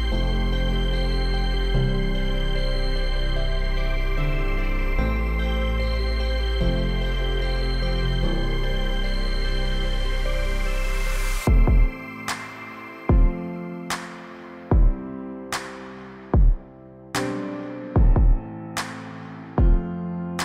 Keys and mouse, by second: 0.5 [, 0.9 ctrl+z, 0.9 click, 0.9 [, 1.1 ctrl+z, 1.2 [, 1.5 click, 2.2 ctrl+z, 2.4-2.7 ], 2.7 click, 3.7 ctrl+z, 4.0 ], 4.0 ], 4.4 click, 5.1 ctrl+z, 5.1 click, 5.4 ctrl+z, 5.4-7.2 typing, 5.5 click, 5.8 ctrl+z, 6.5 click, 6.9 click, 7.1 ctrl+z, 7.2 click, 8.3 click, 9.5 click, 9.9 ], 10.1-11.7 drag, 12.3 click, 13.2 click, 14.5 click, 15.0 [, 15.2 click, 15.8 ], 16.0 click, 16.2 click, 16.6 ], 16.7-17.8 drag, 16.7 ], 18.1 click, 18.5 ctrl+z, 18.5-20.3 typing, 18.7 click, 18.9 click, 19.6 click, 19.9 click.